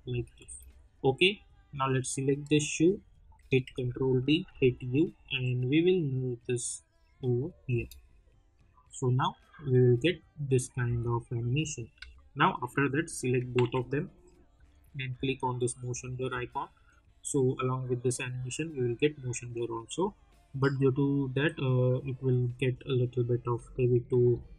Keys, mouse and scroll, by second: 1.2 click, 3.6 ctrl+d, 4.5 u, 5.2-7.7 drag, 7.7 space, 10.8 space, 11.5 click, 11.9 u, 12.6 click, 13.5 ctrl+a, 14.5 click, 15.8 space.